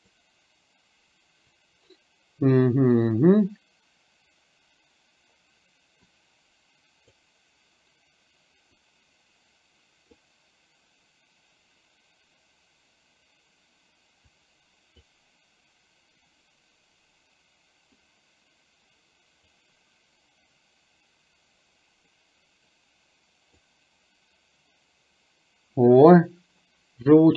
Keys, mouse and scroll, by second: 6.1-7.2 drag, 8.8-10.3 drag, 14.3 click, 18.0-19.6 drag, 22.1-23.7 drag.